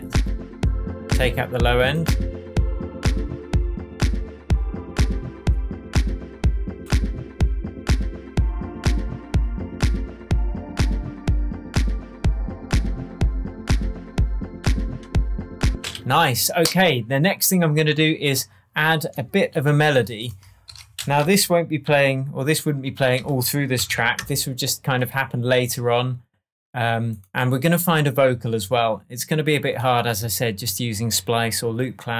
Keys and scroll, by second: 15.6 space, 15.9 super+s, 19.5 shift+super+t, 20.7 shift+super+r, 20.9 shift+super+r, 21.2 shift+super+m, 21.8-24.3 typing.